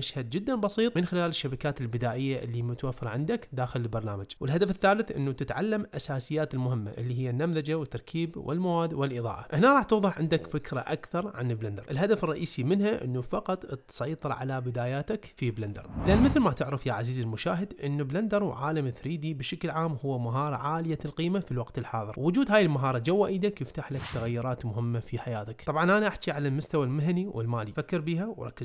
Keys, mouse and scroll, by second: 0.0-1.4 typing, 1.1 Tab, 1.2 click, 1.6 Tab, 2.2 click, 2.6 click, 3.1 click, 4.0 click.